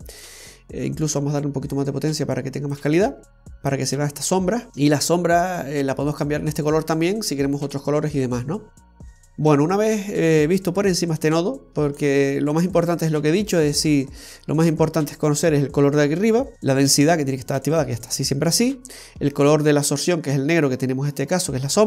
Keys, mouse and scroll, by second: 1.3 click, 4.7-6.3 scroll up 2, 6.3 click, 8.5-8.9 scroll down 1, 8.9 scroll up 1, 9.1-11.2 scroll down 11, 11.2 click, 12.6-13.7 scroll up 4, 13.7 middle click, 14.6-15.8 scroll up 5.